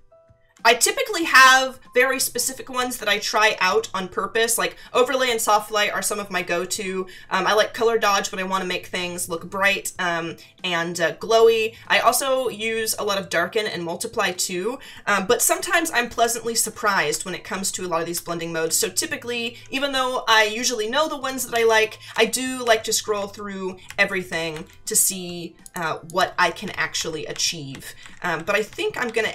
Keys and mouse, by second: 2.8 Down, 16.0 Down, 21.5 Down, 25.6 click, 26.3 Down.